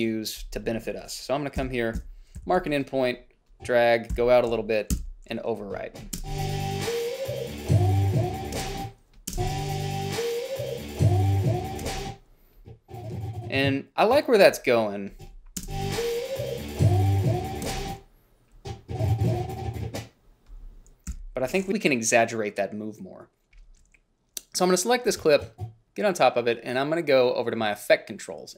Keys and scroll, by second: 1.9 Down, 2.2 Down, 2.7 i, 4.4 o, 5.2 b, 6.5 space, 8.8 space, 12.1 space, 15.8 space, 17.9 space, 21.4 g.